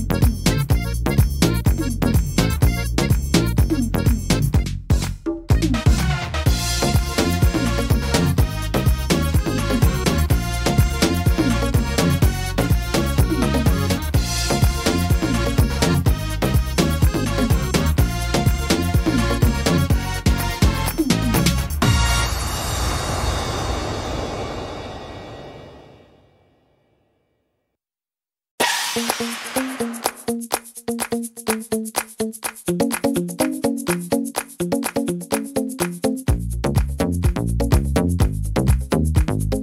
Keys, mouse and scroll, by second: 0.2 middle click, 1.1 ctrl+r, 4.3 middle click, 4.7-5.3 scroll up 1, 5.3 right click, 5.3 scroll up 1, 5.8 shift+right click, 6.5 click, 8.0 scroll up 1, 8.0 middle click, 8.8 shift+middle click, 9.4 middle click, 10.6 middle click, 11.3 ctrl+r, 12.3 middle click, 12.9 right click, 13.3 shift+right click, 14.7 click, 16.1 middle click, 16.7 right click, 17.3 shift+right click, 17.9 click, 18.8 middle click, 20.1 ctrl+r, 21.1 right click, 22.1 click, 22.9 middle click, 23.8 middle click, 24.8 middle click, 25.4 right click, 25.8 shift+right click, 26.9 s, 30.2 ctrl+r, 31.3 right click, 31.8 shift+right click, 32.5 click, 34.0 click, 34.9 middle click, 35.3 scroll down 3, 35.7 shift+middle click, 36.0 scroll up 4, 36.3 middle click, 37.2 right click, 37.7 shift+right click, 38.7 s.